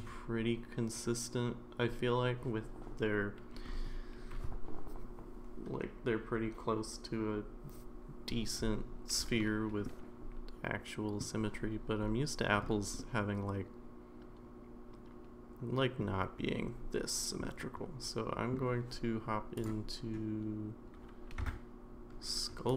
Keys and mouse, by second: 9.8-11.2 middle drag, 13.0-16.0 middle drag, 17.4-18.5 middle drag, 21.4 Tab.